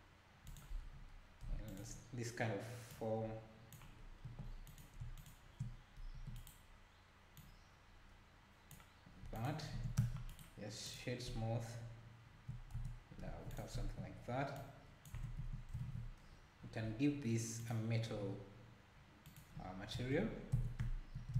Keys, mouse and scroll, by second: 1.7 click, 2.9 click, 4.3 2, 4.7 click, 5.2 shift+click, 6.1 e, 7.4 click, 9.4 alt+click, 10.0 Tab, 10.3-11.3 right drag, 12.7 Tab, 13.5 click, 14.6 click, 15.2 Tab, 15.8 ctrl+s, 16.3 scroll down 1, 16.8 scroll down 9, 17.6-20.0 drag, 20.0 Tab, 20.6 Tab.